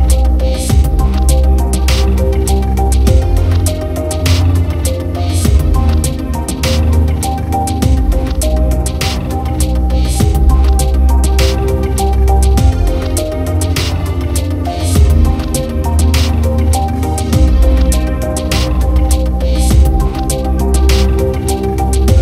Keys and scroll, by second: 3.7 ctrl+alt+=, 16.4 ctrl+-, 17.4 ctrl+0, 19.8 ctrl+j.